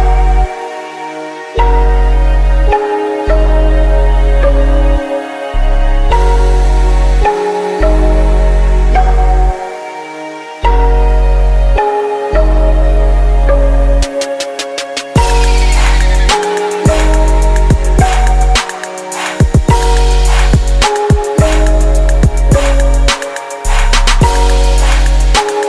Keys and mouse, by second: 4.4-6.9 drag, 7.0-9.8 drag, 10.3-18.4 drag, 17.5 middle click, 18.9 middle click, 19.2-20.8 drag, 20.8 KP_0, 22.5 r.